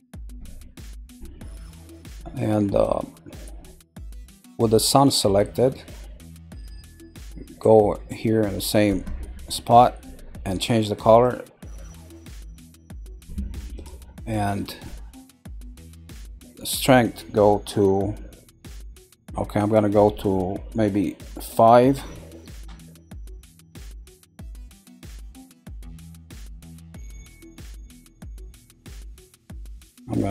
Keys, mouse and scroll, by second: 0.4-1.7 middle drag, 1.7 scroll down 1, 4.8-6.1 middle drag, 6.1-9.1 scroll down 1, 9.7 click, 13.7 click, 15.4-18.8 drag, 19.6-22.6 drag, 24.0 scroll up 1, 24.8 scroll up 11, 25.3 middle click, 26.1 scroll down 3, 26.7-30.3 shift+middle drag.